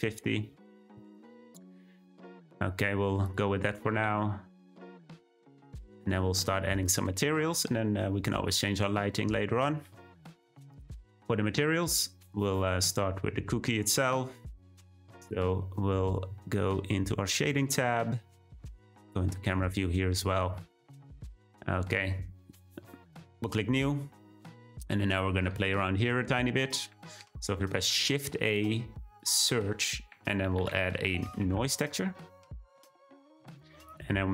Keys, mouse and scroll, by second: 3.2 click, 3.7 g, 5.7 click, 7.6 scroll up 1, 12.3 click, 17.5 click, 19.1 `, 19.7-20.2 scroll up 1, 20.2-20.7 scroll up 1, 20.7-23.2 shift+middle drag, 23.2-33.0 drag.